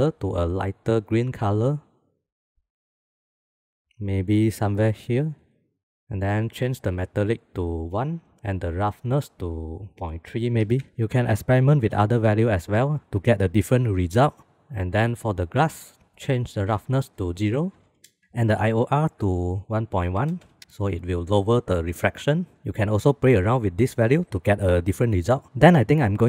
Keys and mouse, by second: 7.2-8.3 drag, 8.8-10.8 drag, 15.7 click, 16.9-18.2 drag, 19.3-22.2 drag.